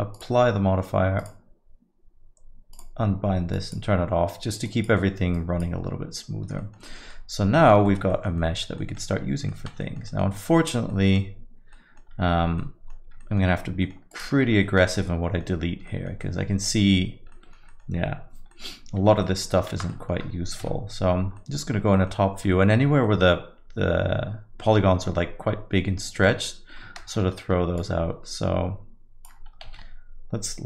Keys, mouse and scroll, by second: 0.1-5.4 click, 6.5 alt+middle click, 6.8 middle click, 7.1 alt+middle click, 7.5 alt+middle click, 7.8 alt+middle click, 8.1 middle click, 8.3 alt+middle click, 8.7 middle click, 9.4 alt+middle click, 9.8 middle click, 10.0 alt+middle click, 10.9 middle click, 11.7 alt+middle click, 12.2 Tab, 12.6 alt+middle click, 13.2 middle click, 13.8 middle click, 14.1 click, 15.0 Tab, 15.1 alt+middle click, 15.9 alt+middle click, 16.2 middle click, 17.3 middle click, 17.7 middle click, 18.5 middle click, 19.2 middle click, 19.7 shift+z, 19.9 middle click, 20.6 KP_7, 21.3 middle click, 21.7-22.0 scroll down 2, 21.9 middle click, 22.3 scroll up 1, 22.5 middle click, 23.0 middle click, 27.0 shift+space, 29.8 alt+a.